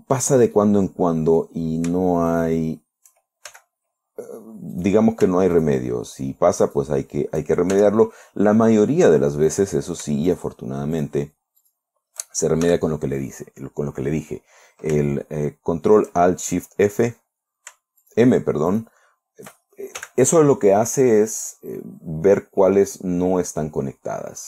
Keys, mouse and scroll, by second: 1.0-2.0 drag, 2.8 shift+right click, 4.0 shift+f, 5.2 right click, 6.0 shift+right click, 7.2 shift+right click, 8.2 shift+f, 10.0 right click, 10.8 shift+right click, 11.4 shift+right click, 12.1 shift+right click, 13.1 shift+f, 15.6-16.7 shift+middle drag, 17.4 right click, 18.5 shift+right click, 19.2 shift+right click, 20.4 f, 21.2 scroll down 2, 23.1-24.4 middle drag.